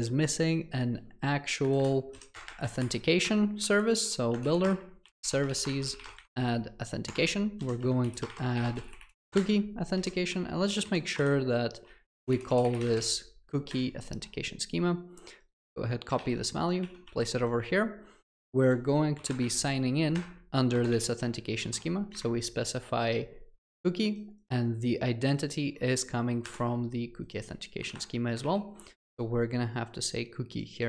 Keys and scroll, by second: 4.4 Return, 9.3 Return, 16.2 ctrl+c, 21.0 ctrl+v, 28.5 ctrl+v.